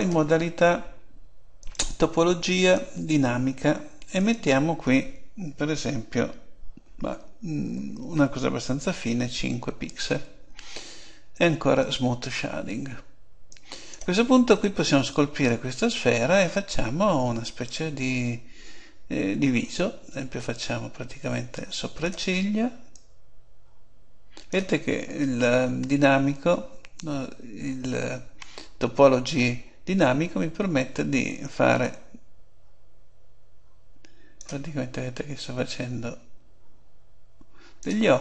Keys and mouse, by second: 1.6-6.0 drag, 11.9-14.6 drag, 14.6 middle click, 15.2-16.3 drag, 20.1-21.9 drag, 22.9-24.6 drag, 31.8-33.6 drag, 35.4-37.2 drag.